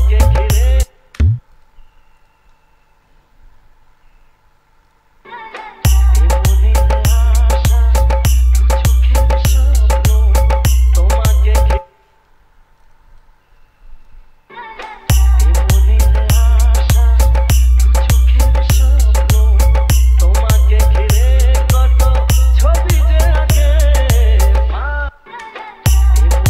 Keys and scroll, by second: 1.1 space, 5.5 space, 11.9 space, 14.8 space, 25.2 space.